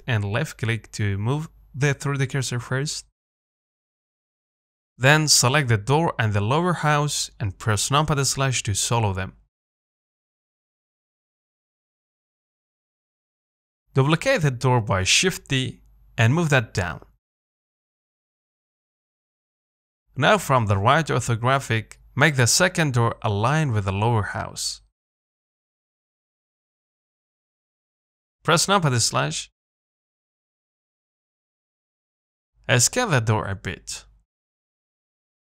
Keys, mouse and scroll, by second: 4.4 middle click, 5.2 z, 6.9 click, 8.6 ctrl+click, 8.8-9.4 scroll down 1, 9.4-9.8 scroll up 2, 9.8 shift+middle click, 10.6 z, 11.2 shift+click, 12.0 KP_Divide, 12.9-13.9 middle drag, 13.9 z, 14.9 click, 15.7 KP_1, 17.1 shift+d, 20.0 KP_3, 21.4 g, 25.2 middle click, 25.4 z, 25.7 scroll up 1, 26.0 shift+middle click, 26.9-27.3 scroll down 2, 27.3 middle click, 27.5-27.9 scroll up 1, 27.9 middle click, 28.6 KP_Divide, 29.5-29.8 scroll down 1, 29.8 shift+middle click, 30.1-30.4 scroll up 3, 30.4-31.5 shift+middle drag, 31.5-32.4 scroll down 1, 32.4 s, 35.0 s.